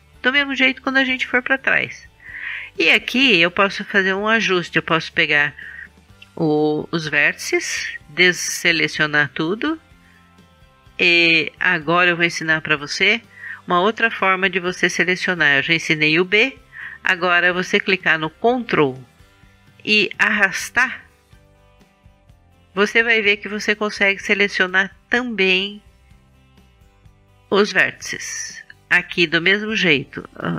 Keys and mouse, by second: 4.8-6.9 drag, 8.9 a, 20.4-22.3 drag, 22.3-26.5 middle drag, 27.3-28.4 drag, 28.4-30.5 middle drag.